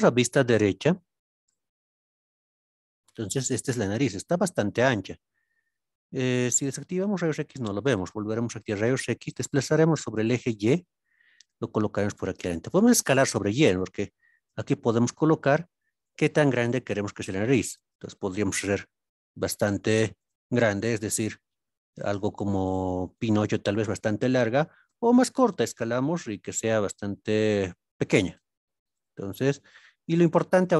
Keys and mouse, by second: 1.4 KP_Decimal, 2.9 click, 6.5 alt+z, 9.3 g, 9.9 x, 10.6 y, 12.4 drag, 13.4 s, 13.9 y, 14.9 click, 15.5 g, 16.1 y, 17.7 click, 18.4 s, 20.2 click, 20.7 g, 22.7 y, 23.2 click, 24.8 s, 25.1 y, 27.3 click, 28.9 g, 29.4 y, 30.5 click.